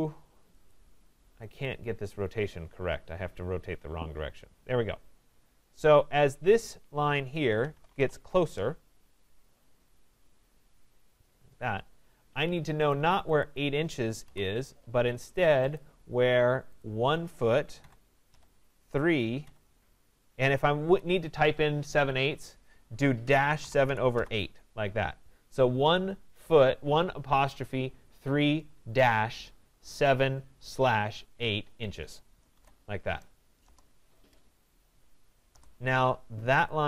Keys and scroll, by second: 8.0 Return, 33.6 Return.